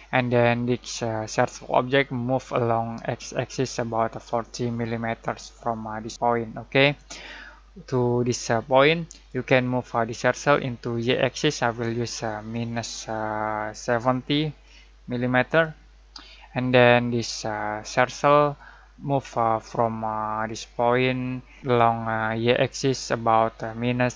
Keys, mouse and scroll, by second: 8.3-9.6 drag, 12.7 -, 13.8-15.0 typing, 15.4 click.